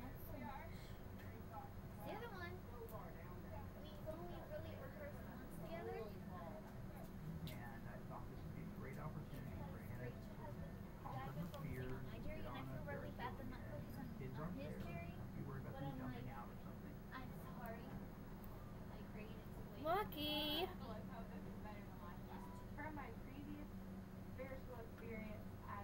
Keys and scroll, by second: 7.9 Return, 8.2 Delete.